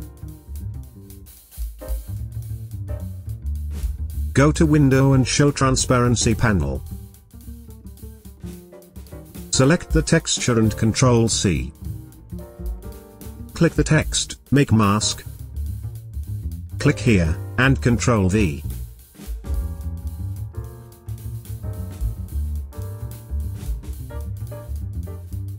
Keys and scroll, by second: 8.9 space, 11.2 ctrl+c, 19.0 ctrl+v.